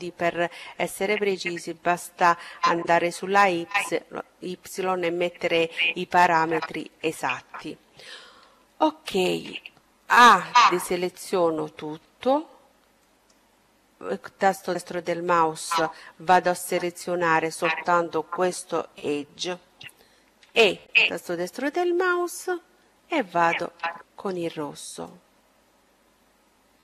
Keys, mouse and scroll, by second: 5.7-9.2 middle drag, 9.3 a, 11.9-13.8 right drag, 14.8-17.2 middle drag, 19.3 e, 21.0-22.8 drag, 23.0-24.7 middle drag, 24.0-25.8 drag, 26.5-26.8 middle drag.